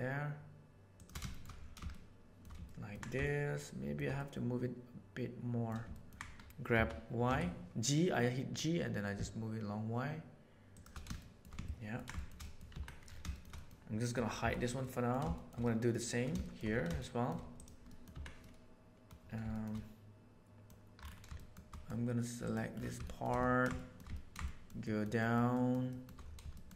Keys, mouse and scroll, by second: 1.2 shift+middle click, 1.9 shift+middle click, 2.6 ctrl+middle click, 3.2 shift+middle click, 4.1-5.6 middle drag, 5.9 ctrl+middle click, 6.7 g, 11.1 shift+middle click, 11.6 ctrl+middle click, 12.1 shift+middle click, 12.4 middle click, 12.7 Tab, 13.2 shift+middle click, 14.4 h, 14.8-15.2 middle drag, 15.4-16.0 shift+middle drag, 16.4 shift+middle click, 17.0 middle drag, 17.6 click, 17.8 click, 18.1 Tab, 18.4 middle click, 19.1 middle click, 19.5 shift+middle click, 20.2 middle click, 20.4 middle click, 21.3 shift+middle click, 21.6 middle click, 23.0 shift+middle click, 23.4 ctrl+middle click, 23.7 shift+middle click, 24.1 ctrl+shift+middle click, 24.8 shift+middle click, 25.1 shift+middle click, 25.6 shift+middle click, 25.9 shift+middle click, 26.5 shift+middle click.